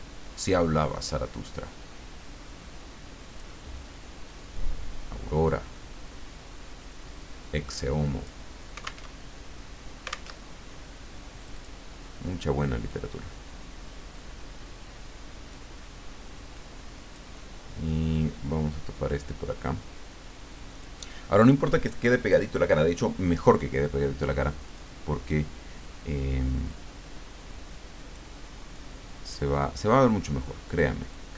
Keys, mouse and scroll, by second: 4.5-8.5 drag, 9.1 alt+Tab, 10.3 alt+Tab, 11.4 click, 12.9-15.7 drag, 16.5 click, 17.3-20.8 middle drag, 20.8 click, 24.6 click, 26.7-28.5 drag, 28.7-30.1 drag, 30.6 click, 31.1-31.3 drag.